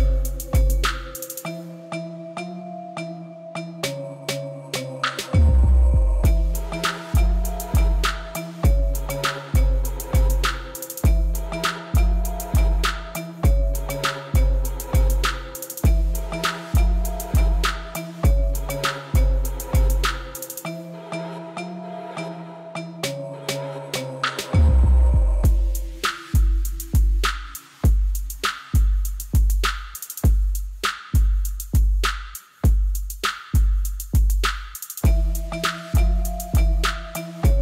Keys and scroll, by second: 0.0 1, 0.2 shift+z, 1.1 Tab, 2.9 1, 5.5 shift+z, 6.8 g, 7.0 z, 8.8 Tab, 9.5 g, 9.7 z, 19.2 Tab, 28.6 Tab, 34.1 g, 34.3 z, 36.3 Tab.